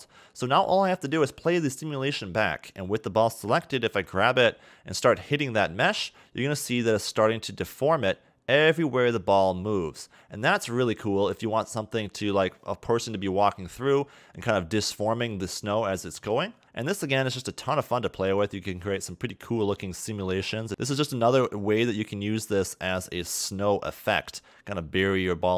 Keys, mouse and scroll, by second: 1.1 click, 4.1 g, 19.0 middle click, 21.1 scroll up 2, 21.6 shift+middle click, 22.4 scroll down 1, 22.8 middle click, 24.9 middle click.